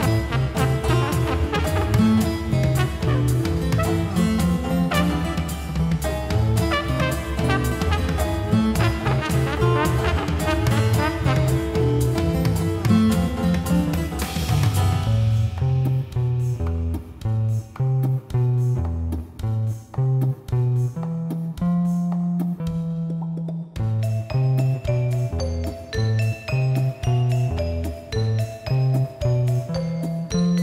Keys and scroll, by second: 0.9 scroll, 1.9 scroll, 3.7 scroll, 4.9-5.2 scroll, 26.9-27.3 scroll.